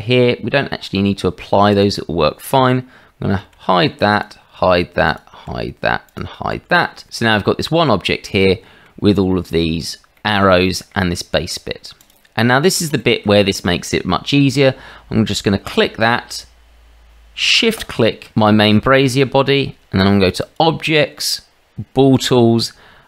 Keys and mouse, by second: 1.8 click, 3.4 h, 4.2 click, 4.6 h, 5.1 click, 5.5 h, 6.0 click, 6.5 h, 7.2-8.8 middle drag, 9.3 shift+middle drag, 10.1 middle drag, 10.6 shift+middle drag, 12.0 click, 12.5 middle drag, 13.0 shift+middle drag, 15.7 click, 20.6-23.0 drag.